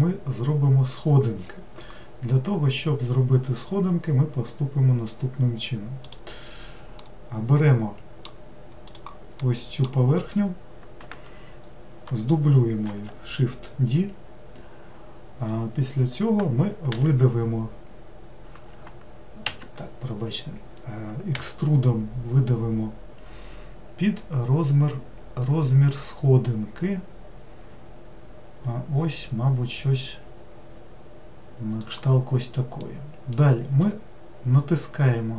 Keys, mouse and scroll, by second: 7.0-8.9 middle drag, 8.9 click, 9.4-10.1 middle drag, 10.1-12.9 scroll up 2, 12.9 shift+d, 32.8-35.3 middle drag.